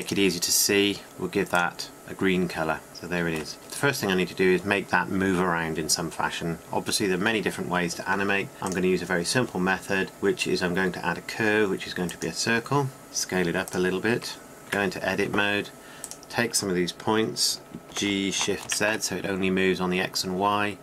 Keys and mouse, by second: 2.9 middle click, 3.6 KP_7, 14.1 s, 14.5 s, 16.0 Tab, 19.2 g, 19.4 click.